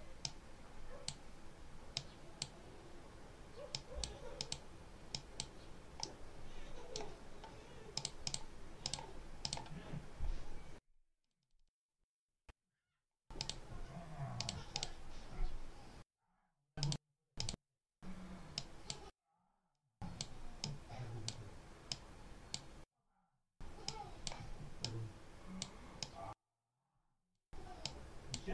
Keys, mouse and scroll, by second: 0.1 click, 1.8 click, 3.6 click, 4.3 click, 5.0 click, 5.9-7.0 right drag, 7.8 click, 8.7 click, 9.3 click, 11.1 click, 13.3 click, 14.3 click, 16.7 click, 17.3 click, 18.5 click, 19.6 click, 20.5 click, 21.8 click, 23.7 click, 24.7 click, 25.9-27.4 drag, 27.7 click.